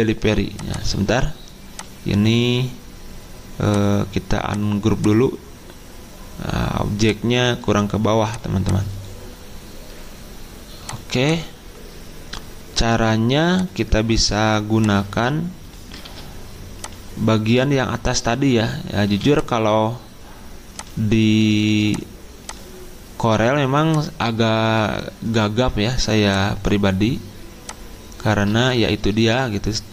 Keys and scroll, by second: 16.1 ctrl+z, 19.1 z.